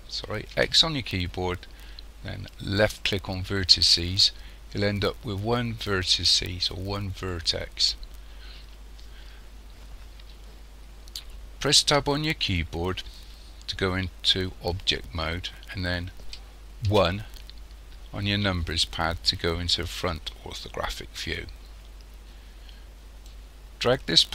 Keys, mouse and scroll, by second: 0.5 x, 11.8 Tab, 16.9 KP_1, 23.3 click.